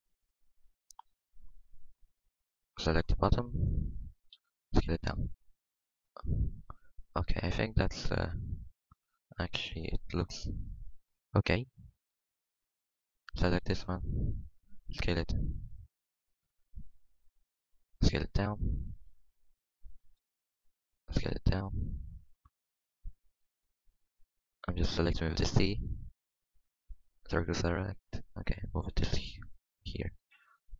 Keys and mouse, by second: 1.2 a, 1.8 c, 3.2 s, 3.8 Tab, 4.3 Tab, 4.6 z, 5.3 Tab, 7.7 Tab, 9.1 a, 9.4 z, 11.0 c, 13.6 s, 15.0 s, 16.8 a, 17.3 c, 18.4-20.9 typing, 22.2 click, 22.9 c, 22.9 s, 23.7 a, 23.9 c, 25.1 s, 26.1 a, 26.3 c, 26.7 middle click, 29.3 Tab, 30.3 z.